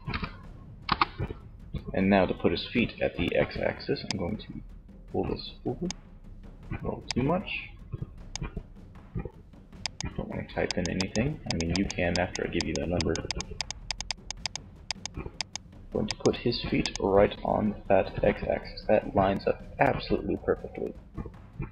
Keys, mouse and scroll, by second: 3.7-5.0 drag, 6.3-8.0 drag, 10.1-17.7 drag, 19.9 middle click.